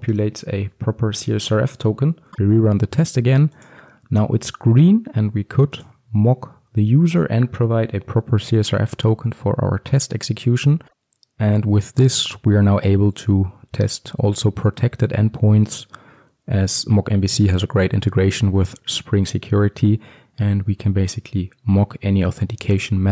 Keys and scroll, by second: 0.3 Return, 2.3 ctrl+F5.